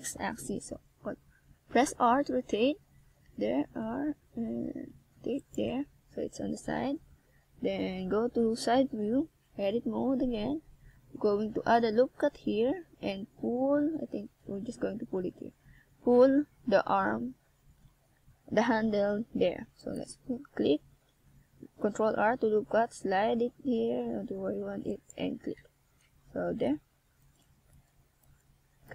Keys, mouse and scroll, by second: 1.3 click, 4.2 Tab, 5.1-5.8 scroll down 1, 5.8 middle click, 5.8 scroll down 1, 8.7 KP_1, 9.6-10.4 scroll up 1, 11.2 Tab, 11.8 z, 12.2 a, 12.6 c, 16.1 g, 17.8 click, 18.0 a, 18.2 c, 20.0 g, 21.1 click, 21.3 a, 21.5 c, 23.2 g, 23.8 click, 24.0 a, 24.2 z, 24.5 Tab, 27.3-28.1 shift+scroll up 2.